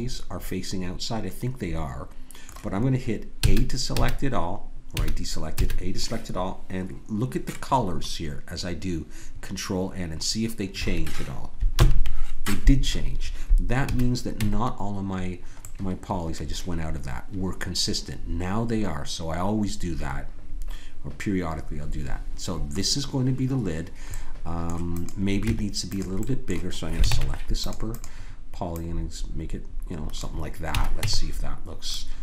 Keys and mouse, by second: 3.4 a, 3.9 a, 4.9 a, 5.6 a, 11.8 ctrl+n, 13.8 a, 14.4 Tab, 22.9-24.6 middle drag, 25.0-26.9 drag, 25.4 Tab, 27.1 ctrl+Tab, 28.0 click, 30.7 a, 31.0 Tab.